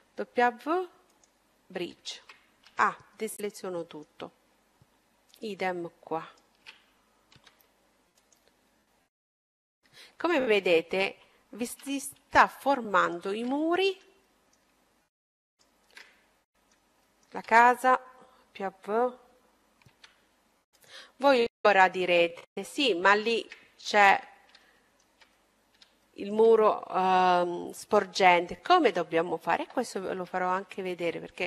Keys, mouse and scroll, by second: 0.4-3.7 middle drag, 1.4 a, 4.5-7.3 right drag, 6.8 w, 8.5 middle click, 9.1-12.5 middle drag, 11.7 a, 12.8-14.8 right drag, 13.5-15.9 middle drag, 15.3-17.1 right drag, 16.0-18.6 middle drag, 19.7 w, 21.2-21.5 scroll up 1, 21.8-27.6 middle drag, 29.8 a, 31.0-31.4 right drag.